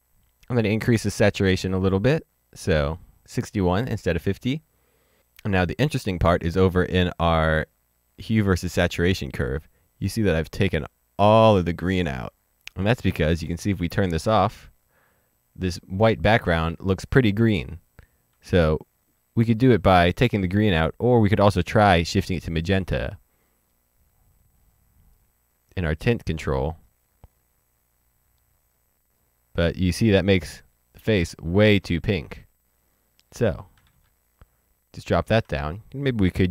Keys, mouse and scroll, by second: 1.7 click, 6.0 click, 8.4 click, 14.1 click, 18.2 click, 18.4 ctrl+z, 21.0 click, 22.9 click, 25.1 click, 33.7 ctrl+z, 33.8 ctrl+z.